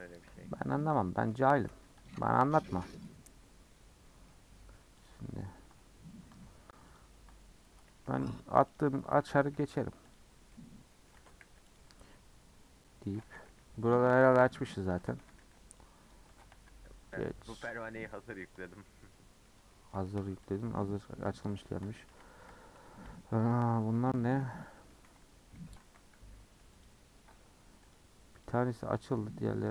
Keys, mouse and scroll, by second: 0.2-2.0 middle drag, 2.0 alt+Left, 2.6 alt+Left, 3.3-5.1 middle drag, 5.1 click, 6.9 ctrl+click, 8.7 alt+click, 9.2 a, 10.1 u, 10.4 scroll down 1, 10.5 middle click, 11.1 Tab, 11.4 h, 11.7 click, 11.9 Tab, 12.0-13.2 middle drag, 13.2-16.5 typing, 14.3 Tab, 14.9 click, 15.0 Tab, 16.3 Tab, 16.7-17.6 scroll down 17, 17.6 middle drag, 17.9-18.5 scroll up 4, 18.5 click, 19.0-20.6 middle drag, 20.6 click, 20.8-21.1 middle drag, 21.1 scroll up 1, 21.4 click, 22.1 a, 22.5 Tab, 23.0 scroll up 2, 23.2-24.2 middle drag, 24.2 a, 24.8 middle click, 25.2 Tab, 25.5 Tab, 25.9 a, 26.8 u, 27.6 Tab, 27.9 click, 28.4 click, 28.7 Tab, 29.2 Tab.